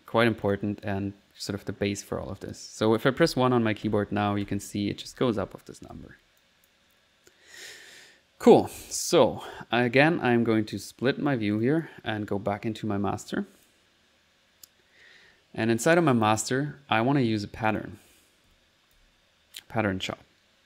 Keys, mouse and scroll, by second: 0.4 click, 0.8 click, 2.4 click, 2.7-5.9 typing, 6.4 click, 9.5 click, 10.7 click, 11.6 click, 13.2 click, 13.9 click, 17.6 click, 18.5 alt+p, 18.7-19.5 typing.